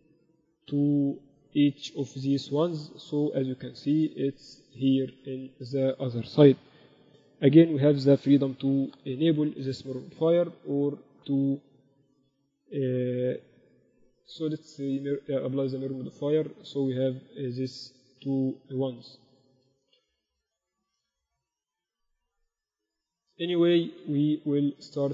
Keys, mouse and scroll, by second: 0.6-2.4 right drag, 1.0 ctrl+a, 2.6 z, 3.3 KP_6, 3.5-3.9 KP_6, 4.2 z, 8.6 KP_4, 8.9-9.4 KP_4, 9.8 KP_4, 14.7-16.4 drag, 15.4 Tab, 15.9 Tab, 16.0 Tab, 17.1-18.0 KP_6, 18.6 KP_4, 18.9-19.4 KP_4, 20.1 ctrl+z, 20.5 ctrl+z, 21.1 ctrl+z, 21.5 ctrl+z, 22.0 Tab, 22.6 Tab, 23.0 Tab, 23.3 Tab, 24.0 z, 24.3 Tab.